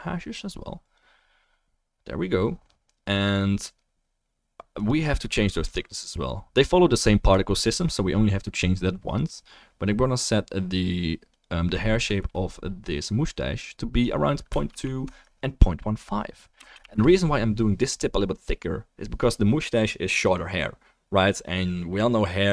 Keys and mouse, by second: 3.2-6.6 right drag, 4.7 click, 9.1-11.4 right drag, 16.5 click, 16.5 right click, 18.3 middle click, 18.8-20.5 drag, 18.8 right click.